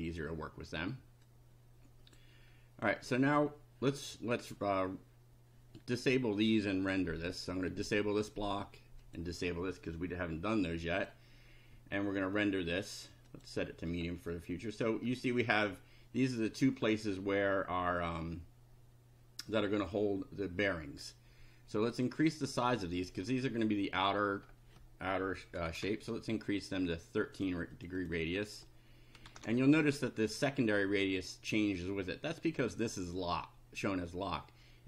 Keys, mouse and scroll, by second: 0.1 click, 1.2-2.3 drag, 5.8 right click, 7.2 click, 7.7 right click, 9.0 click, 11.0 click, 13.3 click, 14.2 middle click, 17.0 middle click, 21.9 click, 22.3 click, 22.9 click, 23.6 click, 25.3-26.2 typing, 27.4 click, 27.8 click, 29.0-29.8 typing.